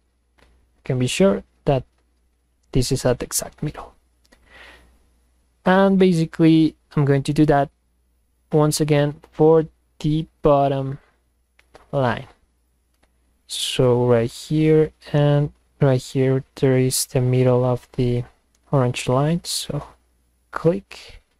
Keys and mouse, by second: 3.7 click, 9.3 click, 10.9 click, 12.6 click, 19.6 click.